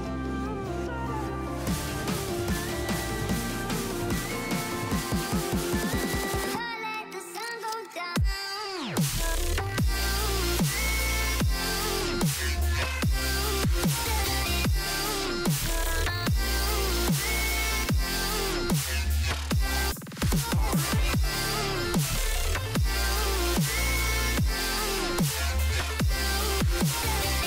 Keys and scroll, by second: 4.6-5.1 typing, 5.4 End, 5.8 Return, 6.5 ctrl+v, 6.8 Up, 7.9 shift+End, 8.5 ctrl+c, 8.7 Down, 9.0 Home, 9.0-9.4 typing, 11.1 ctrl+v, 11.1 BackSpace, 11.3 BackSpace, 12.0 BackSpace, 15.6 Delete, 16.4 a, 16.8 End, 16.8 ", 17.3 Home, 17.4 Delete, 17.6 Delete, 18.6 Delete, 18.8 typing, 22.4-23.4 typing.